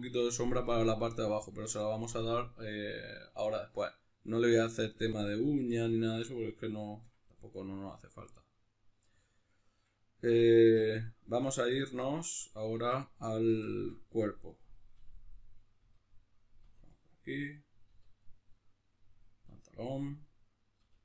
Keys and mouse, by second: 10.4 Tab, 12.4-13.9 right drag, 13.9 Tab, 14.5 right click, 14.9 l, 16.9-21.0 middle drag, 17.9 l, 19.5 l, 20.7 l.